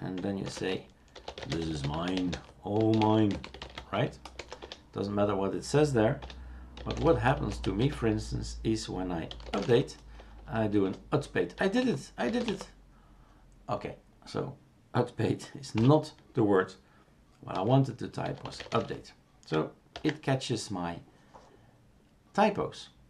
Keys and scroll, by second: 0.4-4.4 typing, 4.6 Return, 6.2 Return, 6.6-11.8 typing, 17.5-19.2 typing, 19.9 ctrl+s.